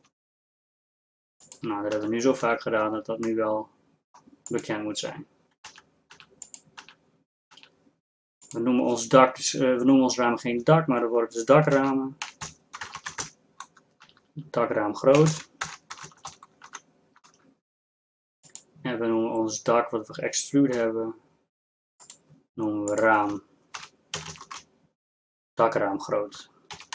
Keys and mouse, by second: 2.0 z, 2.6 z, 2.9 Tab, 5.7 z, 6.5 z, 6.8 z, 7.9 z, 14.2 BackSpace, 14.4 BackSpace, 16.3 o, 21.2 g, 24.0 click.